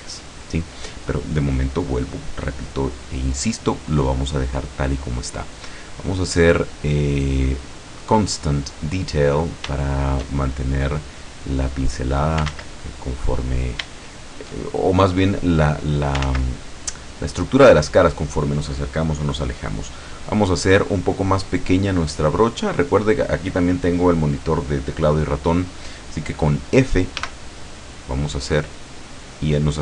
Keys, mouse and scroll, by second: 1.1-1.4 scroll up 1, 1.6-2.0 scroll up 1, 2.3 scroll down 1, 3.1-3.5 scroll down 1, 3.8-4.3 scroll down 1, 6.1 click, 7.7 click, 8.9 scroll down 1, 9.8 shift+middle click, 10.5 shift+middle click, 11.2-12.6 drag, 12.6 ctrl+z, 13.3 scroll up 2, 14.0 shift+middle click, 14.7-16.3 shift+drag, 16.3 ctrl+z, 17.2 scroll up 2, 17.3 scroll down 2, 27.2 f.